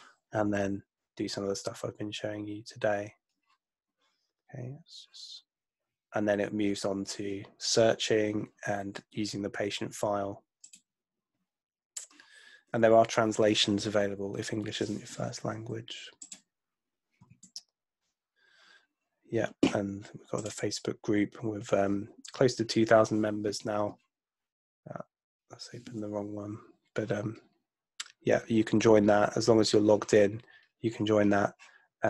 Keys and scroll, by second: 18.0 super+Tab.